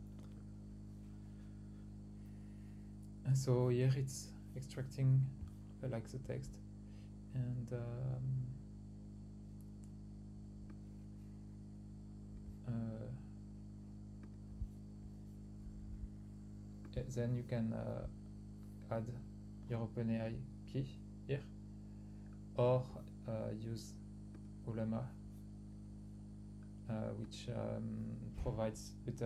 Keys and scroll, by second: 0.0-0.9 typing, 3.9-4.3 typing.